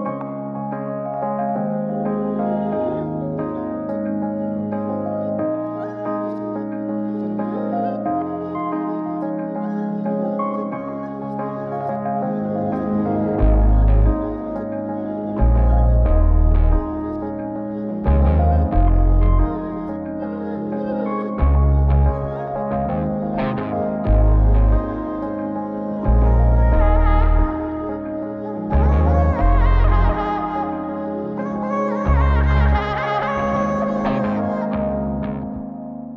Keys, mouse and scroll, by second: 1.8 n, 2.7-4.0 drag, 20.5 click, 21.7 click, 24.9-29.5 drag, 30.3 click, 30.8 middle click, 32.0 click, 33.0 ctrl+a, 34.9 middle drag.